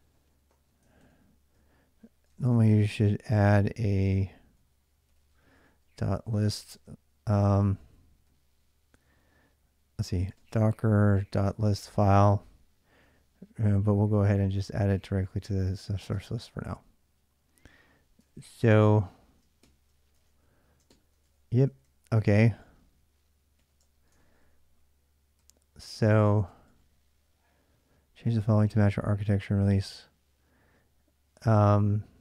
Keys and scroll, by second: 0.0-8.0 typing, 0.6 ctrl+[, 2.3 ctrl+[, 7.1 ctrl+[, 9.6-16.6 typing, 18.0 ctrl+[, 18.2-26.5 typing, 19.9 ctrl+[, 21.1 ctrl+[, 21.1 ctrl+j.